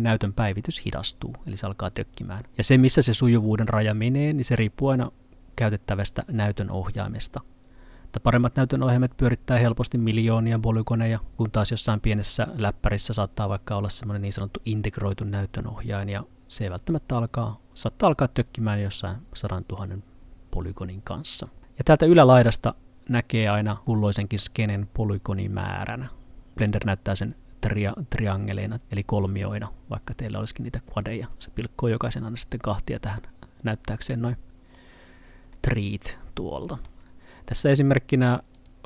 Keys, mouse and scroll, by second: 34.8 middle click, 37.7 click.